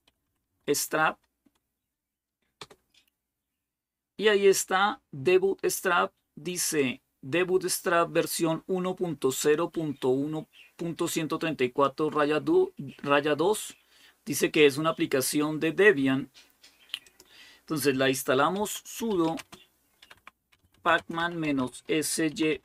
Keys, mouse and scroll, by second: 0.0-0.9 typing, 2.4 typing, 6.6-11.9 drag, 16.9 click, 18.1-22.6 typing.